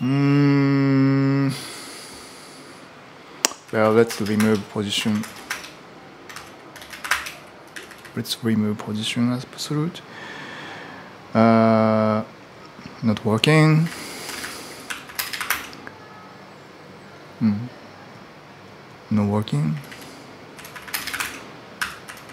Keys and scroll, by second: 3.2-8.0 typing, 13.6-15.7 typing, 19.5-22.3 typing.